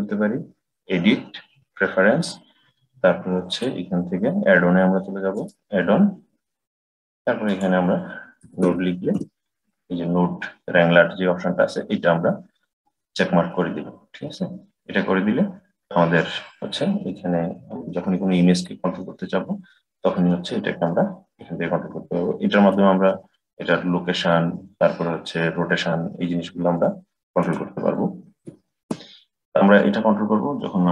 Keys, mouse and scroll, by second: 17.6 click, 22.6-25.6 drag, 27.2-30.3 drag.